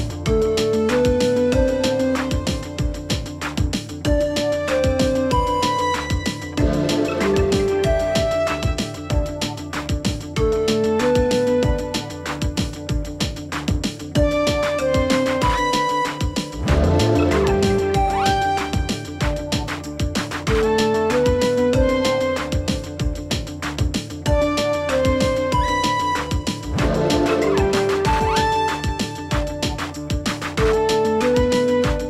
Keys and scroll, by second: 20.9 Delete, 23.1 Delete.